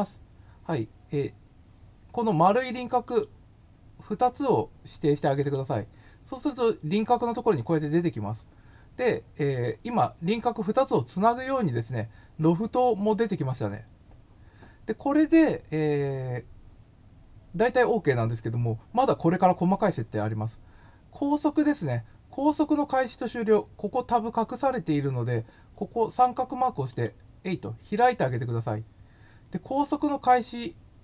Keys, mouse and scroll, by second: 3.0 click, 5.3 click, 26.9 click, 29.7 click.